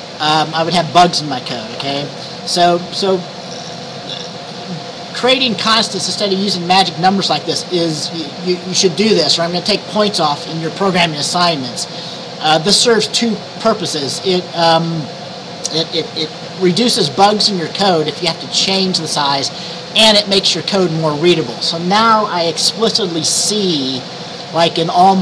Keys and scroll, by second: 1.9 ctrl+s.